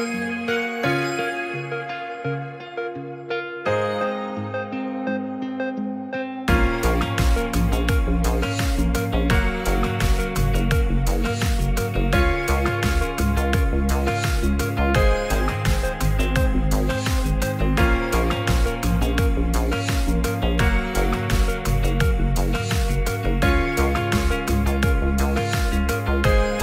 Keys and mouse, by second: 5.9 ctrl+click, 7.2 click, 8.6 click, 10.4 click, 11.5 Tab, 14.2-15.1 middle drag, 16.1-17.6 middle drag, 18.9 ctrl+click, 20.2-20.8 ctrl+drag.